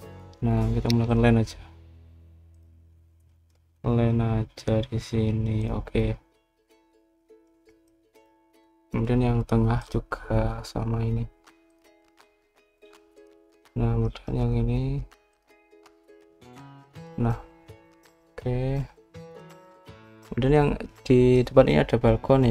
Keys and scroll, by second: 0.4-1.3 typing.